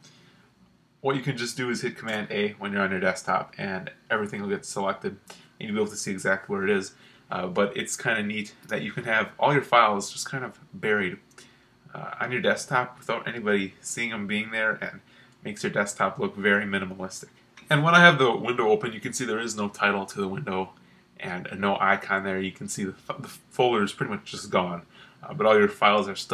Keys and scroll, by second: 2.1 super+a.